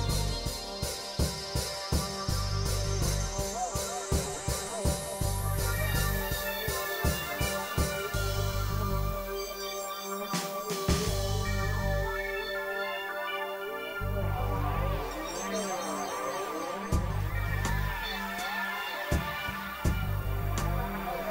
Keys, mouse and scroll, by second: 2.9 click, 3.7 click, 5.8 click, 7.2 alt+click, 8.5 click, 10.0 middle click, 10.5 click, 11.1 click, 11.7 click, 12.2 click, 13.4 click, 14.1 click, 14.7 click, 15.5 click, 16.1-17.0 drag, 17.2 click, 19.4 click.